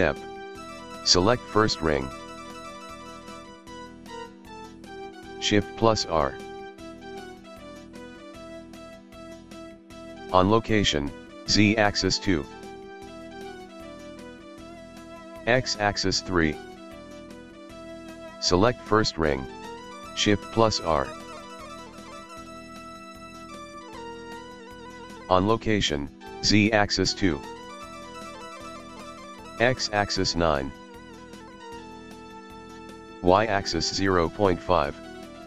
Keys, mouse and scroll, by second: 0.0 click, 0.6 shift+r, 1.0 click, 5.5 shift+r, 11.4-14.5 drag, 15.0-18.0 drag, 18.4 click, 20.0 shift+r, 26.7-28.7 drag, 29.1-32.2 drag, 33.0-35.4 drag.